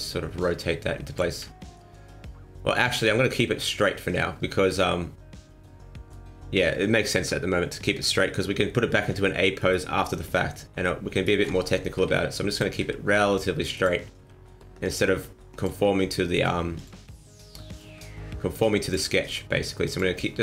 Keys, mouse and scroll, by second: 1.2 ctrl+z, 2.0-2.9 scroll down 4, 2.9 scroll up 4, 3.4-4.3 scroll down 1, 4.4-4.8 scroll down 2, 4.8 middle click, 7.1 KP_1, 8.8-9.6 scroll up 1, 9.6 alt+right click, 9.6 scroll up 1, 11.1 alt+shift+right click, 11.9 r, 12.8 g, 14.2 r, 15.1 g, 16.3 r, 16.9 g, 17.9 r, 19.1 g.